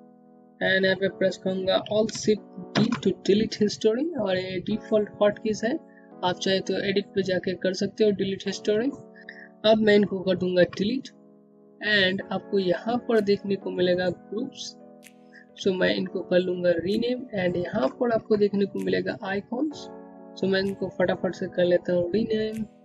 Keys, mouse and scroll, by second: 2.3 click, 3.2 alt+shift+d, 9.2-9.7 scroll down 1, 10.8 Delete, 12.8 click, 14.2-16.5 scroll down 1, 17.1-18.0 scroll down 1, 22.2 click.